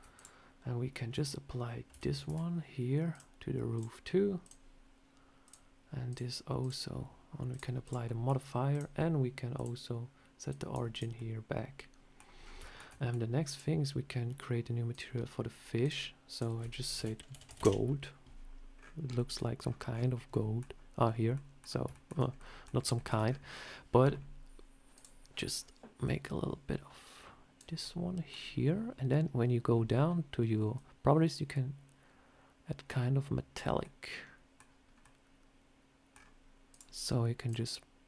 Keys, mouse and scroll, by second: 0.0 click, 1.0 Tab, 1.8 a, 2.1 Tab, 3.0 click, 4.3 click, 5.3 click, 6.5 click, 7.4 click, 7.7 click, 7.9 middle click, 8.6 click, 9.4 click, 10.8 click, 11.0 middle click, 12.3 scroll up 4, 12.5 shift+middle click, 12.8 middle click, 13.4 click, 14.8 click, 15.7 click, 16.2 click, 21.8 middle click, 22.0 scroll down 1, 22.2 scroll up 1, 22.3 middle click, 22.8 shift+middle click, 23.1 scroll up 4, 24.8 click, 27.7 middle click, 29.4 scroll down 2, 29.9 scroll down 2, 30.6 click, 33.7 middle click, 34.7 scroll down 1, 34.9 middle click, 36.0 scroll down 4, 36.6 click, 37.3 click.